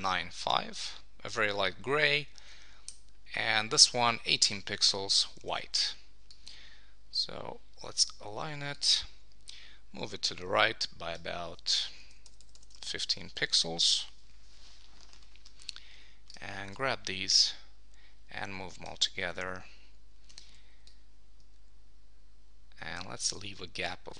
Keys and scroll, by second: 0.4 Return, 2.4 Down, 5.4 super+Return, 12.2 Left, 12.8 super+s, 13.7 Down, 13.9 super+s.